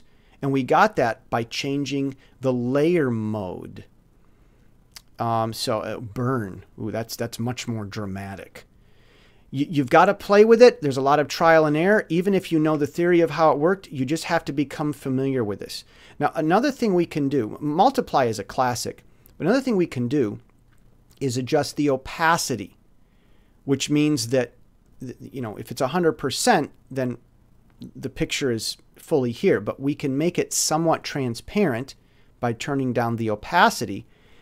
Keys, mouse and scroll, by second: 0.6 click, 6.0 click, 8.5 click, 17.4 click, 23.7 click, 24.8-26.6 drag, 30.8 click, 33.9 click.